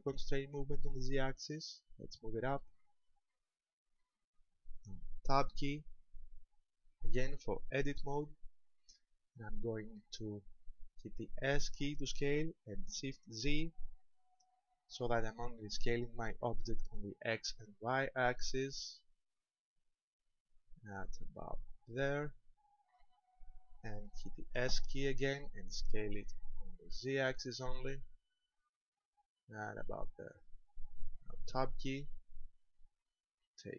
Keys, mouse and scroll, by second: 3.0 ctrl+click, 4.0 middle click, 6.6 Tab, 8.2 shift+middle click, 9.4-10.4 scroll up 7, 11.9 s, 23.0 ctrl+click, 25.6 s, 30.4 ctrl+click, 31.8 Tab, 32.8 middle click.